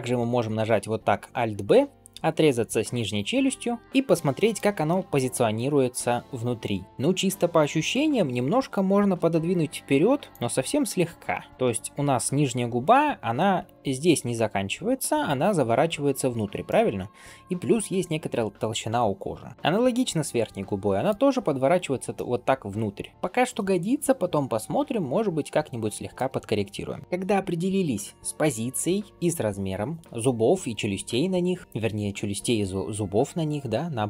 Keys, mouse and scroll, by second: 0.0 alt+b, 3.5 middle click, 4.7 shift+middle drag, 5.3-6.8 middle drag, 7.9 g, 10.5-11.5 middle drag, 11.5 scroll up 1, 11.6-12.2 middle drag, 12.4-12.9 scroll up 1, 13.6-14.1 scroll down 1, 14.1 d, 14.6 d, 16.5-21.0 middle drag, 19.5-20.3 scroll up 1, 22.0-26.0 middle drag, 27.0 scroll down 1, 30.3-31.6 scroll up 1.